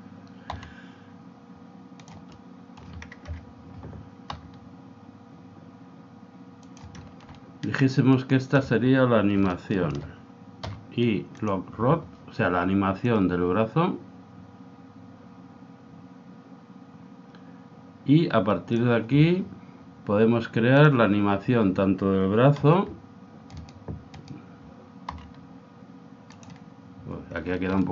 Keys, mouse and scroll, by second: 0.7 r, 2.3-3.8 middle drag, 3.3 KP_1, 4.5 r, 8.1-11.6 right drag, 10.7 i, 13.2 click, 21.0 click, 22.8 r, 24.2-26.1 right drag, 25.3 r, 27.8-27.9 middle drag.